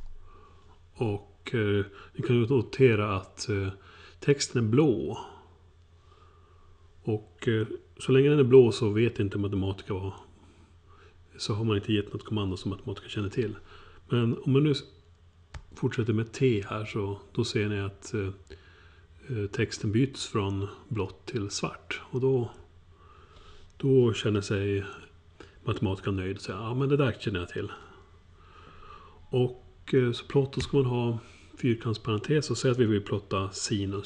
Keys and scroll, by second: 15.5 t.